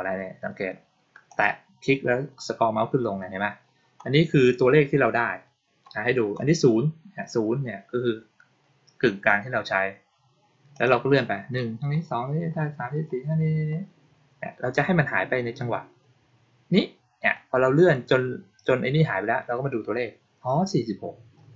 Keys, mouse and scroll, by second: 1.2 click, 1.8-2.6 scroll up 2, 2.6-3.2 scroll down 2, 3.2-3.7 scroll up 2, 3.7-5.7 scroll down 2, 5.7-6.5 scroll down 1, 10.7 click, 11.1-17.2 middle drag.